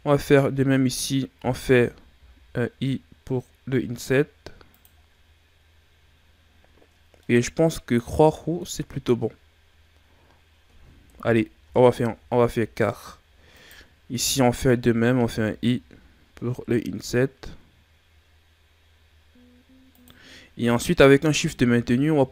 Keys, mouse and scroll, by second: 5.1-7.2 scroll down 13, 7.2-9.5 middle drag, 9.5-10.5 scroll up 5, 11.1 KP_3, 12.1-12.8 shift+scroll up 8, 13.6 right click, 20.5-21.2 scroll down 5, 21.4-22.3 scroll up 1.